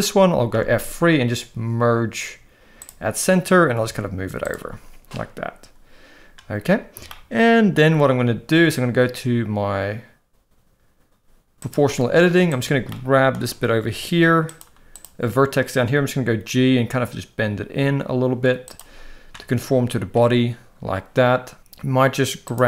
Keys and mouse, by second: 0.6 F3, 3.8 g, 7.2 shift+middle click, 11.6 click, 12.5 click, 12.9 shift+middle click, 14.5 click, 16.1 g, 22.4 click.